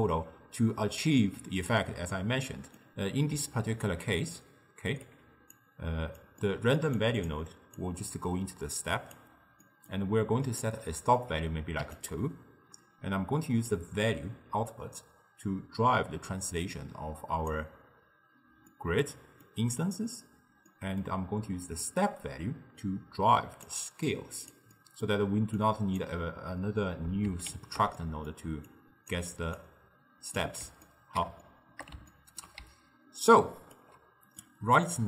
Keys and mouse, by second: 1.7-3.4 middle drag, 3.4 d, 3.6-5.1 right drag, 5.1 d, 5.6 click, 6.4-7.0 middle drag, 7.0 click, 7.8 drag, 9.7-10.5 middle drag, 10.5-12.1 drag, 13.8 click, 18.8-21.8 middle drag, 21.8 click, 24.1 click, 24.8-25.6 middle drag, 25.6 click, 27.6 ctrl+x, 28.0 middle click, 28.7 click, 29.6 click, 30.9-32.7 ctrl+middle drag, 32.7 d, 32.8-33.8 right drag, 33.8 d, 34.5-35.0 middle drag.